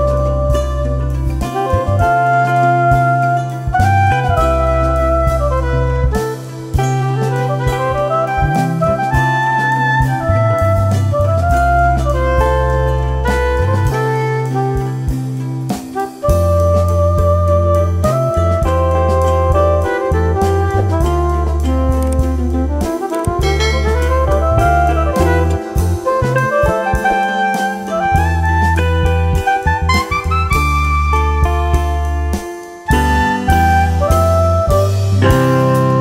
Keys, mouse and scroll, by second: 1.0 scroll up 1, 1.7-3.8 alt+drag, 3.8 F3, 4.5 click, 4.6 F3, 4.9 F2, 5.2-8.7 drag, 8.7 F2, 8.9 click, 10.0 shift+Page_Up, 11.1-15.1 drag, 24.1 click, 27.5 click, 29.7 click, 30.8 F3, 31.4 F2, 32.0 click, 32.6 F3, 33.6-36.0 drag.